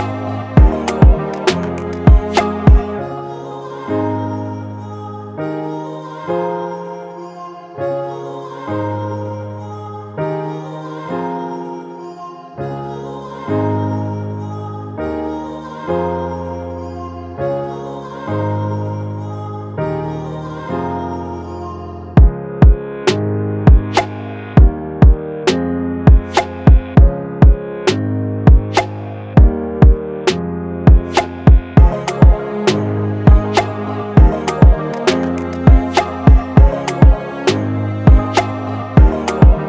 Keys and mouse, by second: 30.4-32.5 middle drag, 32.8-34.3 middle drag.